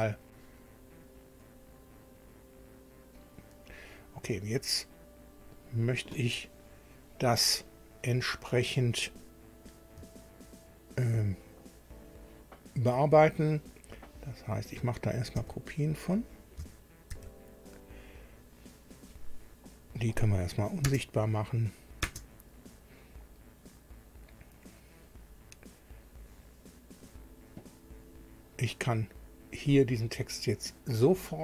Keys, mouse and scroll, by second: 0.3 click, 1.4 click, 3.1 click, 8.7 click, 12.0 shift+click, 15.3 ctrl+c, 17.1 ctrl+v, 19.7 click, 20.9 space, 21.6 click, 22.0 space, 25.1 click.